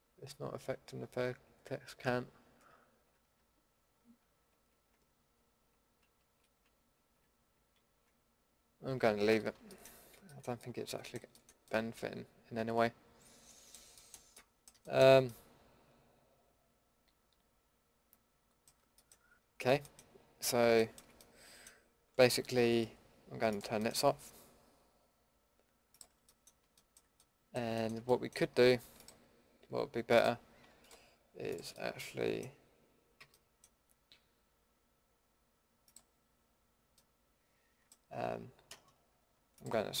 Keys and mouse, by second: 2.8 ctrl+x, 4.3 ctrl+z, 5.4 ctrl+x, 6.2 ctrl+z, 6.9 ctrl+x, 7.8 ctrl+z, 9.3 a, 10.7 middle click, 12.9-13.5 middle drag, 14.0 middle drag, 14.4 middle click, 15.7-16.4 middle drag, 16.5 middle click, 17.5-19.4 middle drag, 20.2 click, 20.8-23.5 middle drag, 23.5-25.9 drag, 27.4-33.2 middle drag, 33.2 a, 37.0-38.8 middle drag, 39.5-40.0 middle drag.